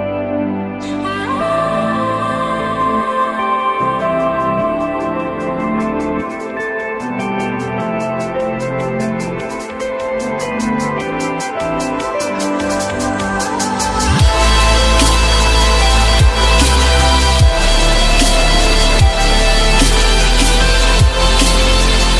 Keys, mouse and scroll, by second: 0.8 alt+middle click, 2.4 alt+middle click, 4.9 F4, 11.8 r, 18.4 ctrl+z.